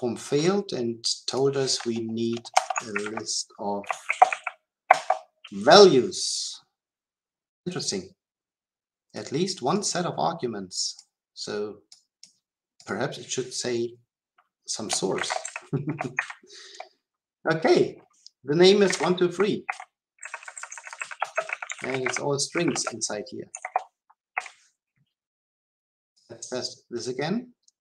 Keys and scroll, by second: 26.1 shift+F10.